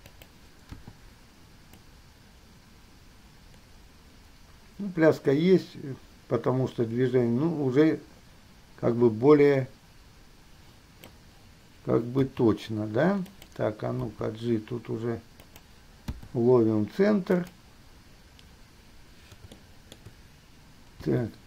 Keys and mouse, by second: 0.9 i, 12.4 r, 14.3 g, 16.3 i, 19.7-20.3 shift+middle drag, 21.2 g.